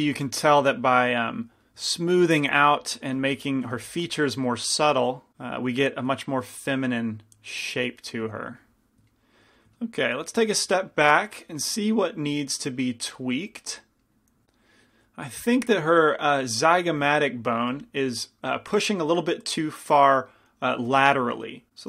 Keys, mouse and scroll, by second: 2.6 f, 3.3 f, 3.9 f, 5.3-6.9 drag, 8.5 ctrl+z, 17.8 f, 20.9 f.